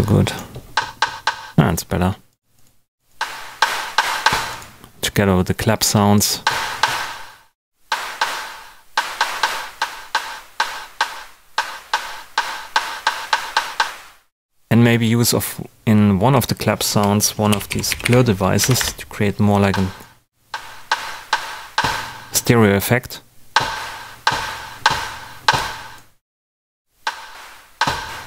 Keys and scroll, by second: 17.2-18.5 typing, 18.6 Down, 18.7 Return.